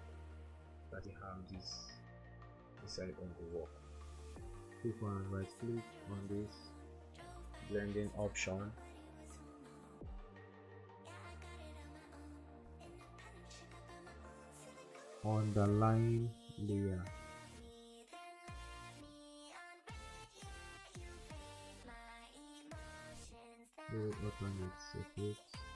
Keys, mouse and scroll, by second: 0.5-1.8 typing, 6.0 right click, 24.7 alt+click.